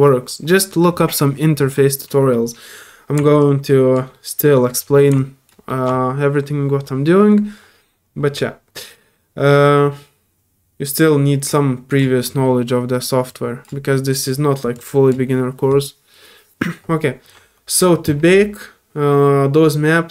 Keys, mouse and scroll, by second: 3.4 alt+click, 4.1 alt+middle click, 4.8 alt+scroll up 1, 5.1 alt+click, 5.7 alt+middle click, 11.5 click, 13.3 click, 14.7 click.